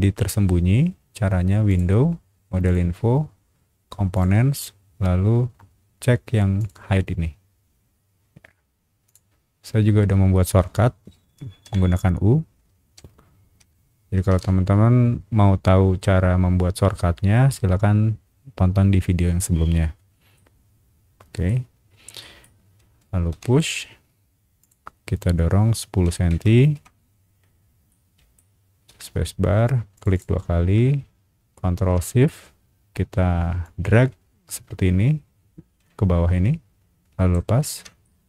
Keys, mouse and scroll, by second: 1.7 click, 2.6 click, 4.1 click, 6.6 click, 9.0 click, 11.6 u, 12.9 u, 13.6 u, 14.3 u, 20.0 scroll up 1, 20.3-21.4 middle drag, 22.2 middle click, 23.3 p, 24.6 click, 26.0 KP_1, 26.7 KP_Enter, 27.5 scroll up 1, 27.9 middle click, 28.9 space, 29.9 click, 30.1 click, 33.6-37.3 ctrl+shift+drag, 38.0 ctrl+shift+middle click.